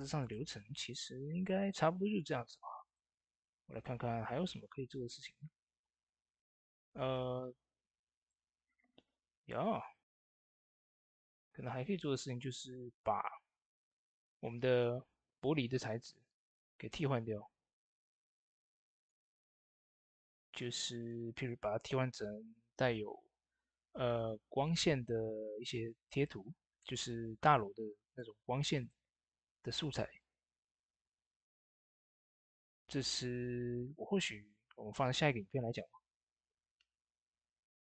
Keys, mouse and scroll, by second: 2.1-2.7 scroll down 1, 2.7 click, 3.1 scroll down 1, 6.2 scroll up 1, 8.0 scroll up 1, 8.0 click, 10.2 ctrl+s, 17.6 ctrl+s, 17.6-18.8 scroll down 1, 18.8 click, 19.4 scroll up 1, 20.8 click, 27.3 click, 27.3 typing, 27.3 click, 37.7 click, 37.7 click, 37.7 typing.